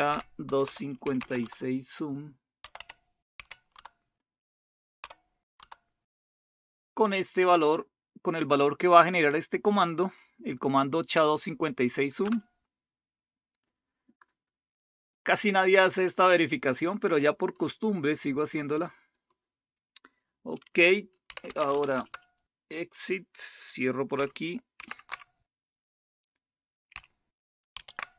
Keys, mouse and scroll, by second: 0.0-3.3 typing, 3.7 Tab, 4.7-5.4 typing, 5.5 Tab, 12.2 Return, 14.1 click, 17.4 click, 19.1 click, 21.0-22.1 typing, 24.7 shift+super+q, 27.7 alt+super+f.